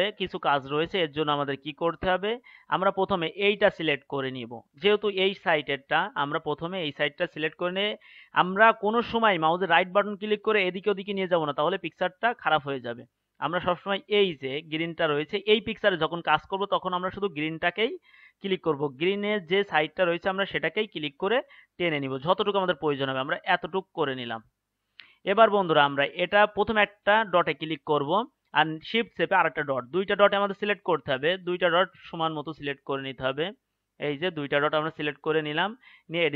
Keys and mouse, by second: 0.8-3.5 drag, 3.5-5.9 right drag, 7.7-24.0 drag, 26.1-36.3 drag.